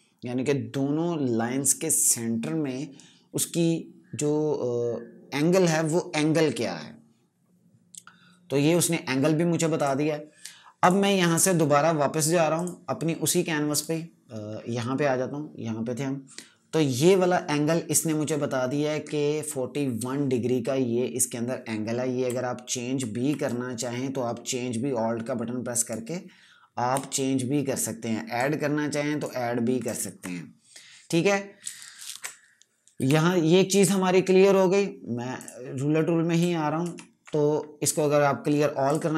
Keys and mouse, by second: 9.7 click, 23.3 alt+click, 28.2 click, 30.1 z, 32.0 ctrl+z, 32.6-33.4 typing, 33.6 right click, 35.3 click, 36.7 ctrl+KP_Subtract, 38.8 click.